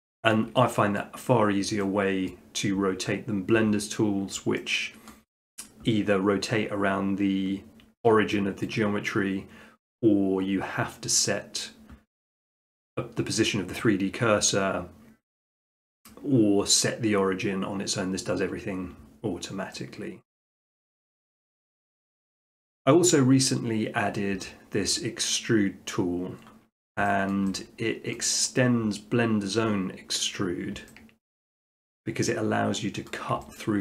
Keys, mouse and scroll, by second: 0.4 shift+middle click, 1.0 middle click, 2.3 middle click, 4.4 middle click, 5.1 shift+middle click, 8.1 shift+middle click, 8.8 shift+middle click, 10.7 middle click, 11.7 middle click, 16.8-17.9 middle drag, 20.3-21.4 middle drag, 26.7 middle click, 27.3 shift+middle click, 28.1 middle click, 29.2 middle click, 29.8 middle click, 30.3 middle click, 31.0-31.3 middle drag, 33.1 middle click.